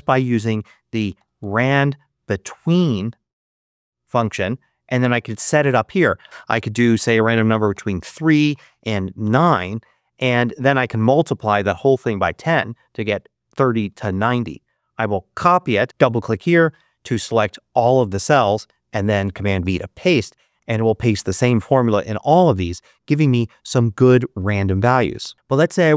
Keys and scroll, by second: 0.8-2.1 typing, 7.6 3, 9.1 9, 11.3-12.4 typing, 13.7 Return, 15.3 super+c, 19.5 super+v.